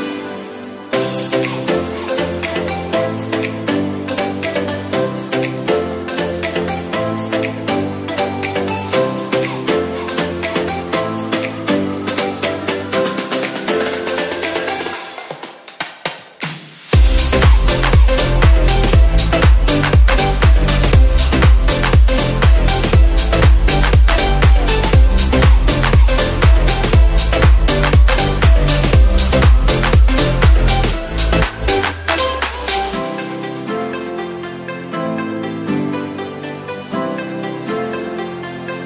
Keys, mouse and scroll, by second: 0.0 z, 0.9 s, 4.6 s, 7.7 x, 8.2 shift+a, 10.4 s, 11.7 g, 11.8 y, 12.5 click, 13.3 g, 13.6 x, 15.3-19.1 typing, 24.8 r, 25.4 x, 30.1 g, 30.2 z.